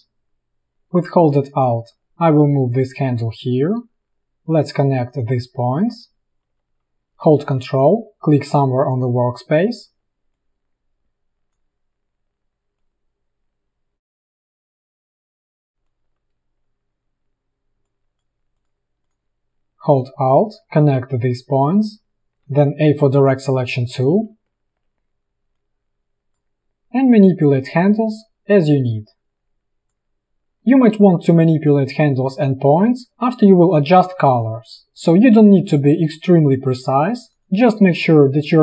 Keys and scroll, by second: 15.7 space, 17.8 space, 22.5 a.